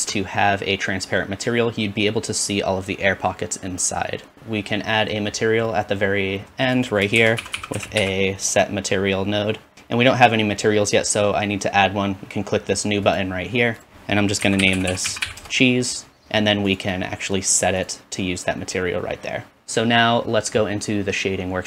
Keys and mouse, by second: 0.0 ctrl+space, 0.1-6.9 drag, 7.0 shift+click, 7.3 shift+a, 7.6 s, 13.1 click, 14.9 e, 19.6 ctrl+s.